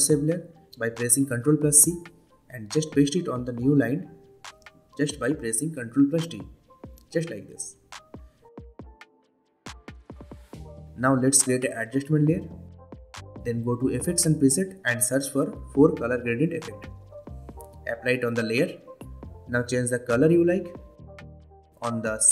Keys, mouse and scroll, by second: 2.1 shift+click, 2.9 ctrl+c, 3.6 click, 4.9 ctrl+v, 6.6-7.8 drag, 10.0 right click, 10.9 click, 11.2 right click, 11.8-19.4 drag.